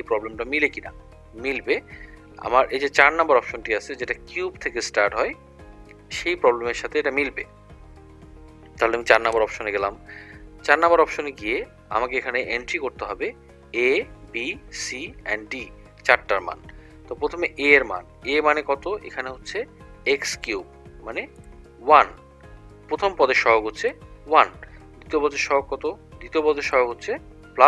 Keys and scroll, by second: 9.4 4, 21.5 1, 23.9 =, 26.7 2.